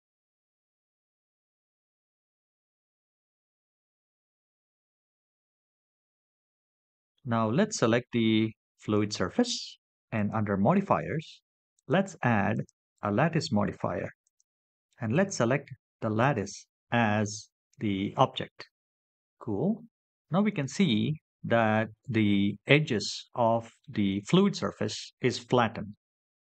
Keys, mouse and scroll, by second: 0.1 Tab, 0.6-1.3 shift+middle drag, 1.6-2.3 scroll down 3, 2.3 middle click, 6.7 h, 8.9 click, 10.7-13.1 drag, 14.5-15.8 drag, 23.5 click, 25.2-26.2 middle drag.